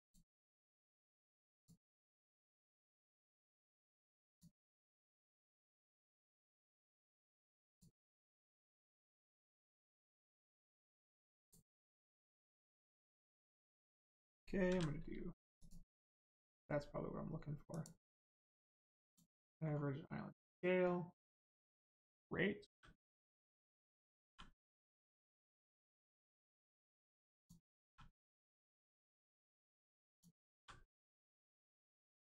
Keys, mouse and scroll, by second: 2.9 click, 7.6 click, 10.1 click, 13.4 click, 14.6 a, 15.6 click, 19.0 click, 19.6 scroll up 1, 20.2 scroll down 1, 20.8 scroll up 1, 21.2 click, 22.6 g, 23.3 click, 24.2 r, 26.8 click, 27.8 r, 30.1 click, 31.4 scroll down 1.